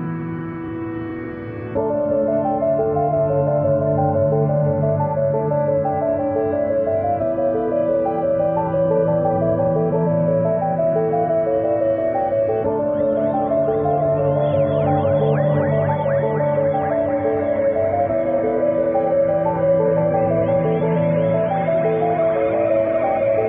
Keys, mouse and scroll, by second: 4.6 click, 5.6 click, 8.1-9.3 typing, 15.7 click, 22.6 click.